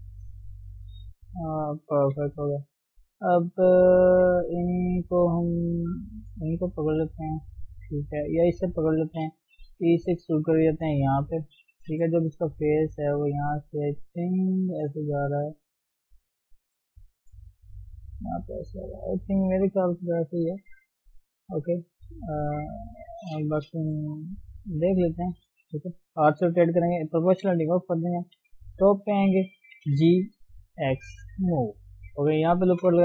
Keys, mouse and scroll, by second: 0.1 g, 1.5 middle click, 2.2 KP_3, 3.2-4.2 scroll up 2, 4.2 click, 6.8 shift+middle click, 7.3 scroll down 2, 7.5 shift+middle click, 8.5 click, 9.7 e, 12.7-15.7 drag, 18.1 d, 18.3-18.9 scroll down 2, 18.9-20.3 middle drag, 20.3 KP_1, 20.9 KP_3, 21.3-22.0 scroll up 1, 22.0 scroll up 4, 22.1-22.6 scroll down 1, 22.6-23.2 scroll up 4, 23.2 shift+middle click, 23.8 g, 25.7 r, 27.5 o, 27.9-28.4 scroll down 1, 28.4 KP_7, 29.8 g, 31.7-32.3 scroll up 2, 32.6 ctrl+r.